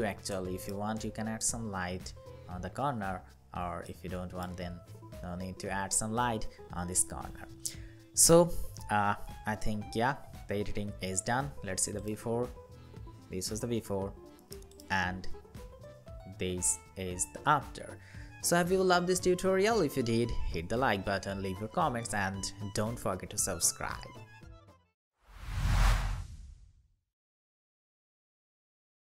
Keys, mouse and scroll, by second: 9.1-10.9 scroll down 1, 11.8 alt+click, 14.4 alt+click.